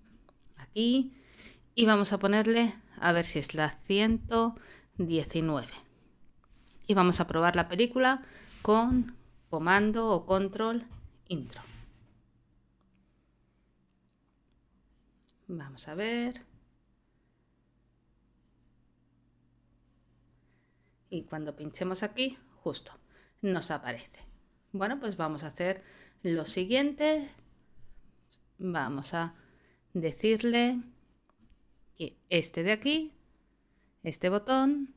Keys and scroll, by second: 4.0 l, 4.9 9, 7.3 ctrl+Return, 10.9 super+Return.